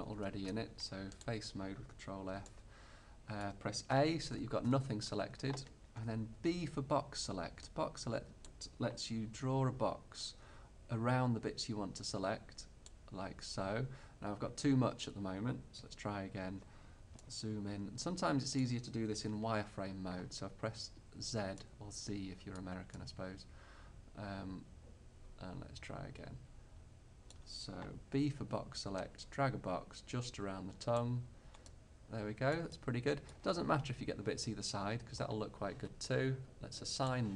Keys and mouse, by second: 0.2 ctrl+Tab, 4.0 a, 4.7 a, 6.4 b, 7.7 click, 9.4 b, 15.9 a, 16.5-19.3 middle drag, 19.3 z, 28.3 b, 37.0-37.3 drag.